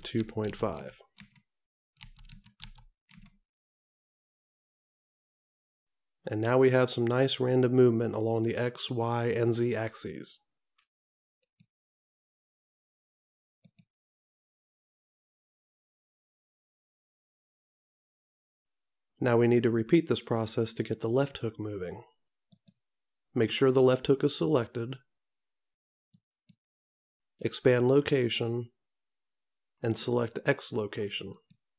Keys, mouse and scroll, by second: 9.0 click, 11.7 click, 13.8 click, 26.3 click, 30.1 click, 31.5 click.